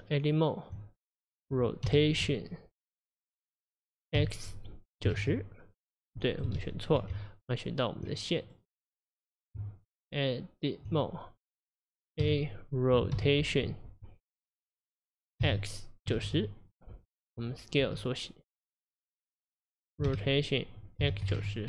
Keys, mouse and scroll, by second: 1.9 r, 6.6 ctrl+z, 7.1 Tab, 8.5 click, 9.0 click, 9.6 Tab, 12.2 a, 13.2 r, 20.1 r.